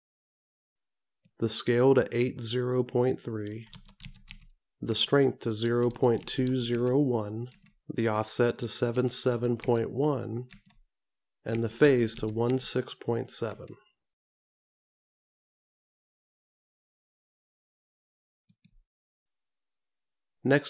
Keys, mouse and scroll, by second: 1.5 click, 9.0 KP_7.